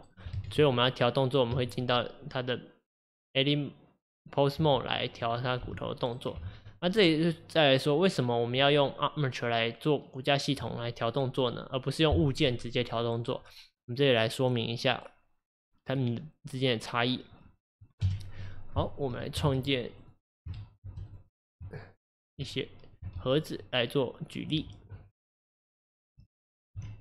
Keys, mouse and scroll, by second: 0.4 ctrl+z, 5.2 click, 5.7 r, 6.4 ctrl+z, 6.9-18.0 middle drag, 18.0 KP_1, 18.8-22.4 shift+middle drag, 22.4 Tab, 26.0-26.7 typing.